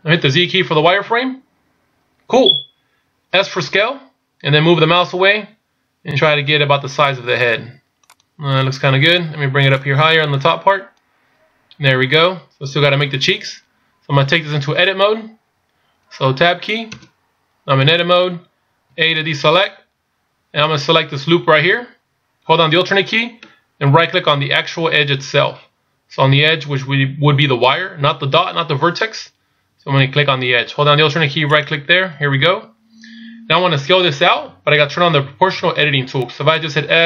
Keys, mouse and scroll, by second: 1.1 z, 3.8 s, 9.9 click, 25.5-28.8 scroll up 2, 31.6 alt+right click.